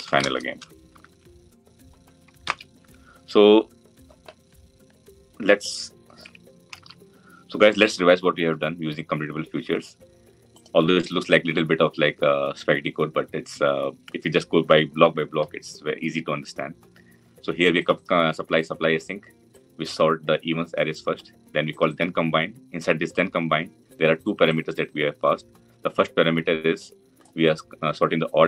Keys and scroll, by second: 2.2 ctrl+alt+l.